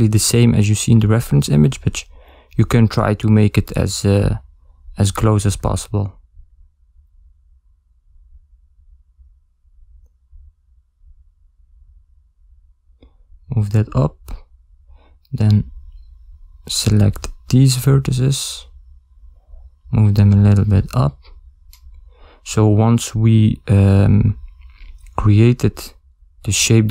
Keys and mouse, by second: 0.7 a, 1.3 ctrl+middle click, 2.3 ctrl+middle click, 5.9 b, 8.0 ctrl+middle click, 8.8 g, 13.1 ctrl+middle click, 14.7 a, 15.1 b, 17.5 g, 20.3 a, 20.7 b, 24.1 g.